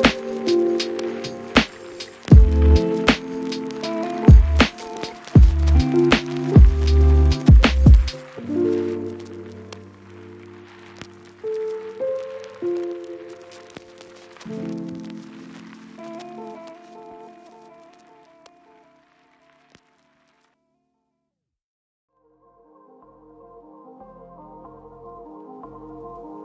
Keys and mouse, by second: 0.5 a, 0.6 shift+middle click, 1.3 shift+middle click, 1.4 Tab, 1.5 shift+middle click, 1.5 shift+z, 2.2 shift+z, 2.3 click, 2.9 Tab, 3.1 shift+click, 3.5 ctrl+click, 3.7 ctrl+KP_Subtract, 3.9 ctrl+z, 4.1 ctrl+click, 4.3 ctrl+z, 5.1 shift+click, 5.4 ctrl+KP_Subtract, 5.6 h, 6.2 click, 6.8 click, 7.4 click, 7.9 a, 7.9 a, 8.1 KP_Divide, 8.4 shift+middle click, 10.6 KP_Divide, 11.0-13.0 typing, 11.1 shift+middle click, 11.8 Tab, 12.0 Tab, 12.0 shift+middle click, 12.2 Tab, 12.4 Tab, 14.8 Tab, 14.9 shift+click, 15.0 Tab, 15.1 b, 15.4 click, 15.9 shift+click, 16.3 click, 16.3 a, 16.3 b, 17.1 Tab, 17.1 click, 17.2 shift+z, 18.5 middle click, 18.6-20.1 typing, 18.8 Tab, 18.9 shift+click, 19.5 shift+click, 19.9 shift+click, 21.5 Tab, 21.8 shift+z, 22.0 a, 23.3 shift+middle click, 23.9 a, 24.2 shift+middle click, 25.4 a, 25.5 middle click, 26.1 middle click, 26.3 shift+middle click.